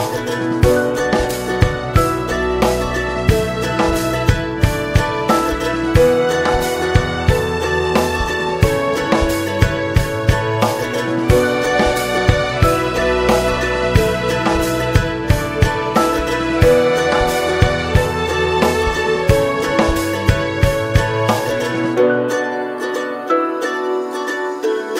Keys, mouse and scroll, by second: 0.8 click, 1.2 KP_0, 2.4 scroll down 2, 2.6 middle click, 2.8-3.2 scroll up 2, 3.2 shift+middle click, 3.4 shift+scroll up 1, 3.7 click, 4.3 Tab, 6.2 `, 7.7-8.0 scroll down 2, 8.0-9.9 middle drag, 9.9 space, 14.3 scroll down 1, 14.3 middle click, 15.0 space, 17.6 middle click, 18.3-18.9 scroll up 1, 19.7-21.7 middle drag, 21.7 click.